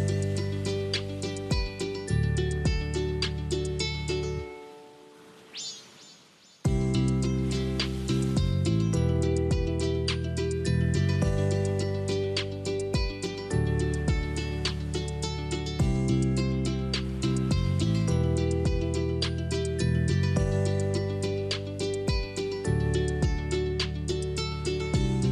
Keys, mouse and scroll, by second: 0.3 click, 1.1-2.1 middle drag, 2.1-3.8 scroll down 4, 3.8-4.6 scroll up 1, 4.6 ctrl+v, 5.6 click, 7.1-8.3 shift+middle drag, 8.3 click, 9.7 Tab, 10.5 click, 12.5 shift+click, 13.3 shift+click, 14.5 g, 22.7 middle click, 23.5 Tab, 24.3 click.